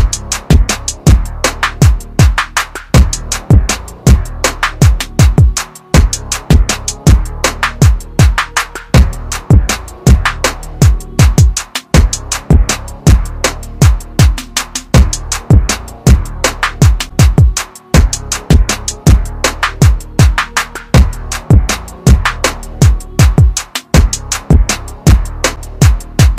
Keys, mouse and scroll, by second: 2.6 click, 8.5 click, 12.8 click.